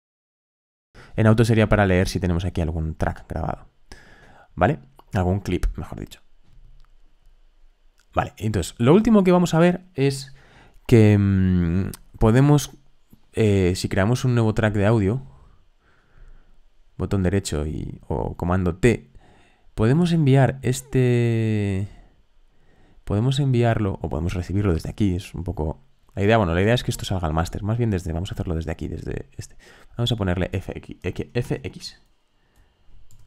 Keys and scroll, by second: 31.4 super+r, 32.8-33.2 typing.